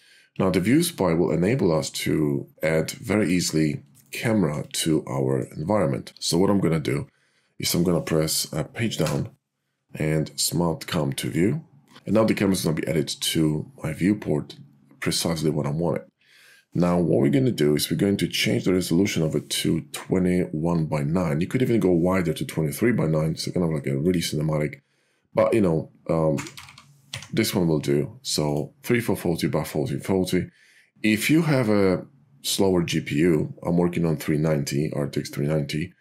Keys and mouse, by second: 2.5 click, 4.9 click, 9.0 Down, 18.7 click, 24.1-28.7 drag, 26.6 4.